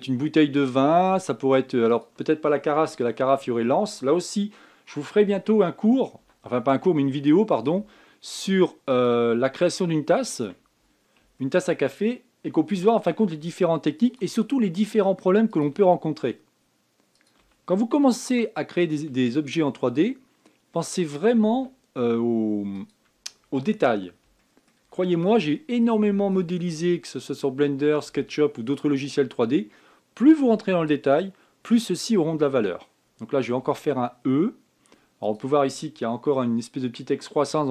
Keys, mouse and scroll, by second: 0.0 e, 1.5 e, 3.6 shift+middle click, 4.2 shift+scroll up 1, 6.9 e, 8.5 e, 11.7-12.1 scroll down 4, 12.1 shift+scroll up 1, 12.2 shift+middle click, 12.5-13.4 shift+scroll down 1, 13.4 e, 14.9 e, 18.1 e, 19.9 e, 22.3 e, 24.2-24.9 scroll up 6, 25.2-27.3 shift+middle drag, 27.3-30.6 scroll up 5, 32.0 scroll down 2, 34.4 e.